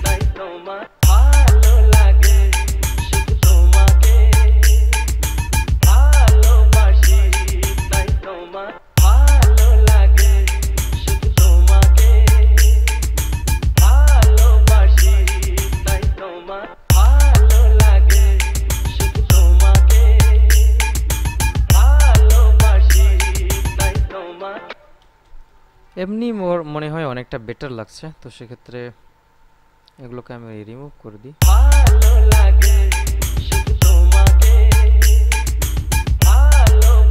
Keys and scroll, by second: 1.0 space, 9.0 space, 16.9 space, 24.8 space, 31.6 space.